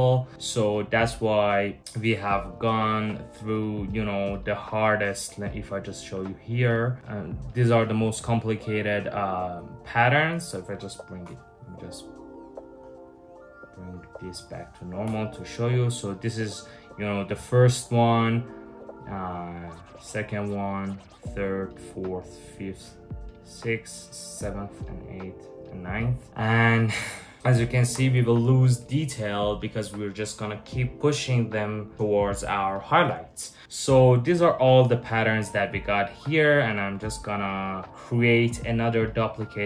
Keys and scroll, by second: 10.8 super+j, 14.7 Return, 27.6 BackSpace.